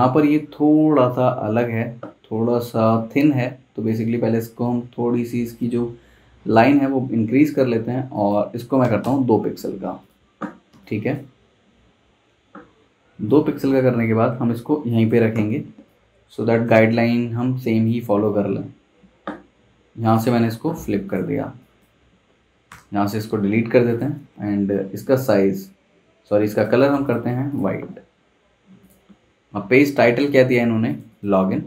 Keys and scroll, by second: 8.8 2, 9.0 Return, 10.7 space, 14.6 z, 15.3 v, 22.0 super+z, 22.7 BackSpace.